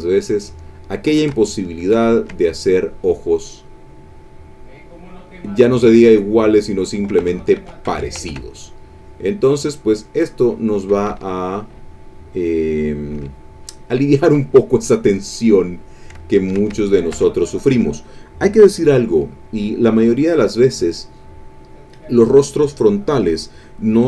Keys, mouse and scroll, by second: 0.3 click, 0.6 click, 1.3 ctrl+shift+click, 2.1 ctrl+shift+click, 3.6 click, 4.7 click, 5.2 click, 5.9 click, 6.6 click, 7.2 ctrl+z, 8.6 ctrl+click, 9.4 click, 10.0 click, 10.4 click, 11.1 e, 11.1-12.4 drag, 12.5 click, 13.1 e, 13.3 click, 15.0-16.0 drag, 16.2 ctrl+middle click, 16.7 ctrl+shift+middle click, 17.2 ctrl+shift+click, 17.3 ctrl+shift+click, 19.5 click, 20.5 click.